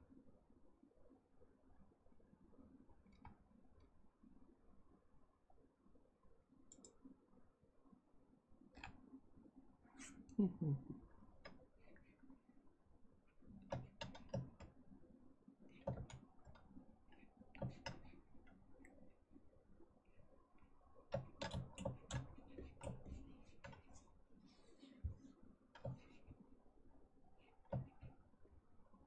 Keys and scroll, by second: 15.9 ctrl+z.